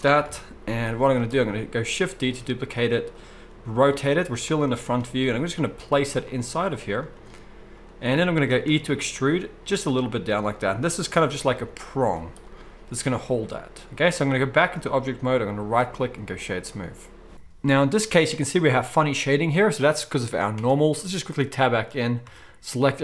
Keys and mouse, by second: 0.2 KP_1, 0.7 z, 2.2 shift+d, 3.5 r, 5.3-15.8 middle drag, 5.3 g, 6.4 s, 7.1 r, 8.7 e, 11.6 Tab, 12.1 z, 15.8-23.0 drag, 20.6 Tab, 22.2 a.